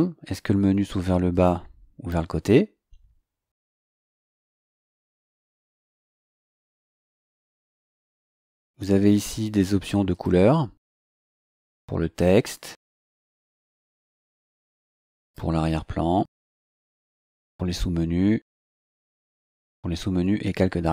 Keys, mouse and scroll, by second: 1.3 click, 4.8 scroll down 2, 8.0-8.9 scroll down 2, 10.1 click, 11.5 click, 14.0 click, 15.2 click, 17.3 click, 18.7 click.